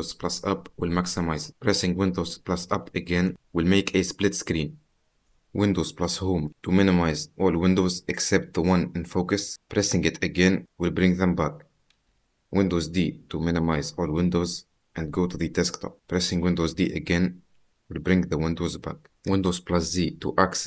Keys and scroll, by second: 2.8 super+Up, 6.4 super+Home, 14.1 super+d, 16.7 super+d, 19.5 super+z.